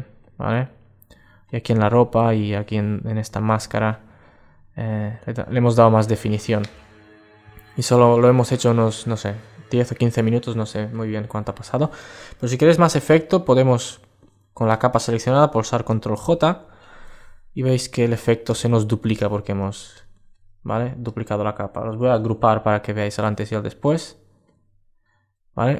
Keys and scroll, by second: 15.7 super+j, 17.1 alt+space, 21.8 super+g, 22.4 alt+space.